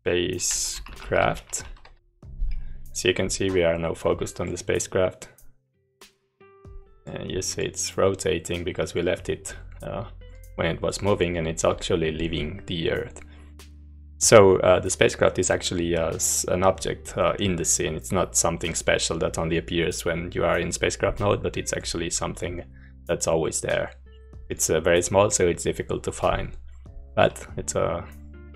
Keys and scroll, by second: 0.0-1.7 typing, 1.8 Escape.